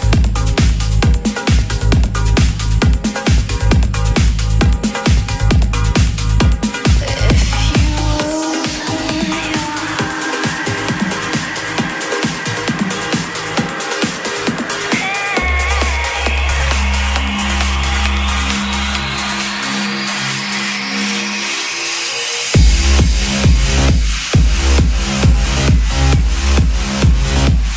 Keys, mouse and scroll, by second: 2.2-3.8 typing, 5.5 click, 10.8-13.1 typing, 14.2-16.8 typing, 18.6-27.7 drag.